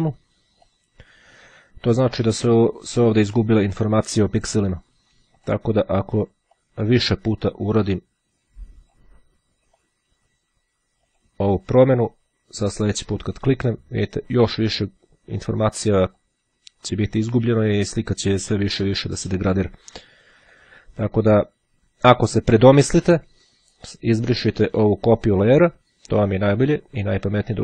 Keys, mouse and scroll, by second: 0.7 click, 5.5 click, 6.6-7.6 drag, 7.9-9.6 drag, 9.9 click, 11.2 click, 13.1 click, 15.5-16.8 drag, 18.1 click, 19.5-20.6 drag, 20.9 click, 24.0 click, 25.7 click, 27.4-27.6 drag.